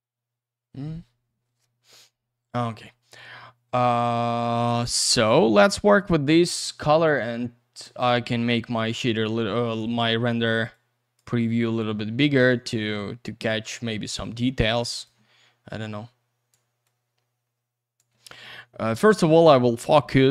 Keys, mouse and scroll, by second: 4.9 scroll down 1, 5.2 middle click, 5.6-6.0 scroll up 1, 6.0 click, 6.3 click, 7.0 click, 9.0 click, 10.7 click, 11.8 click, 13.1 middle click, 13.5 middle click, 15.0 click, 15.8 click, 16.8 click, 20.2 click.